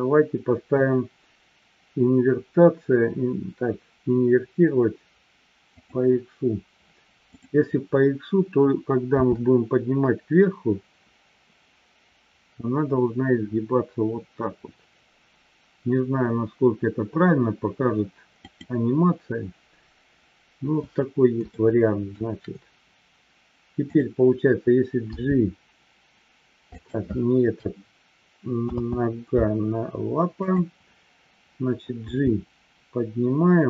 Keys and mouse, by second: 6.0 click, 21.6-22.1 shift+middle drag, 23.9 click, 29.1 ctrl+z, 30.4 click.